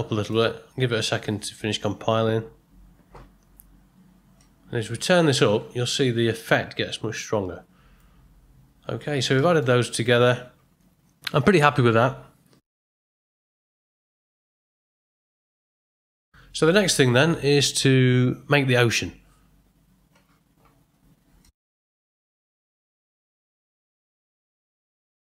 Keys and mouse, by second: 4.4-7.9 drag, 9.4 middle click, 9.9 ctrl+middle click, 14.8 middle click, 15.3 ctrl+middle click.